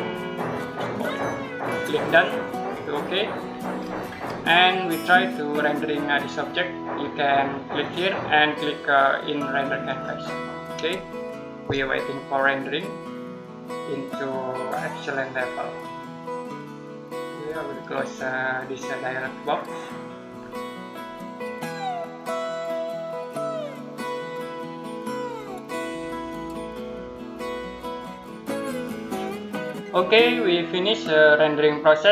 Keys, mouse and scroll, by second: 3.3 scroll down 1, 3.6-4.1 scroll up 1, 4.5 middle click, 7.6 click, 17.2 click.